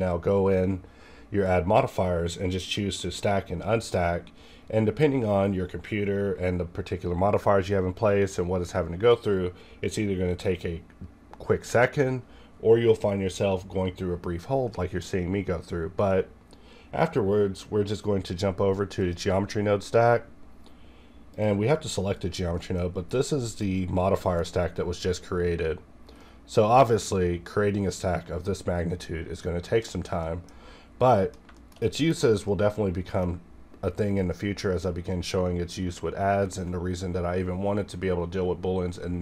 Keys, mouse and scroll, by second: 2.8-12.8 drag, 19.0-21.3 drag, 21.6 click, 22.2 scroll down 1, 22.6 middle click, 22.8-23.2 scroll down 1, 23.4 middle click, 23.4 middle click, 23.6-24.0 scroll down 1, 24.4 scroll down 1, 25.7-26.1 scroll up 1, 26.2-29.6 middle drag, 30.2 middle click, 30.5-31.0 scroll up 1, 31.4 middle click, 31.6 shift+middle click, 32.8 middle click.